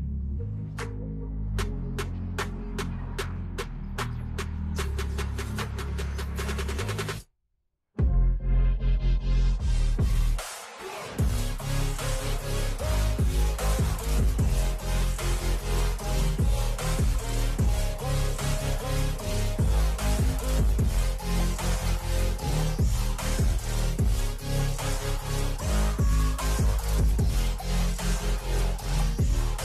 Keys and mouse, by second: 1.0-2.3 typing, 2.5 Return, 4.0 Down, 4.3 Down, 7.3 Left, 7.4 Left, 7.7 Down, 7.9 Down, 8.3 Down, 9.6 click, 11.0 Down, 13.0 click, 15.3 shift+Down, 15.8 shift+Down, 16.0 shift+Down, 16.2 shift+Down, 16.4 shift+Down, 16.5 shift+Down, 16.7 shift+Down, 18.0 shift+Down, 18.2 shift+Down, 18.6 shift+Down, 18.9 shift+Down, 19.1 shift+Down, 19.3 shift+Down, 19.6 shift+Down, 20.2 shift+Up, 21.6 Return, 22.1 Up, 22.7 Down, 23.4 Up, 23.8 Down, 24.6 Return, 25.3 click, 26.5 click, 28.2 click, 28.4 click.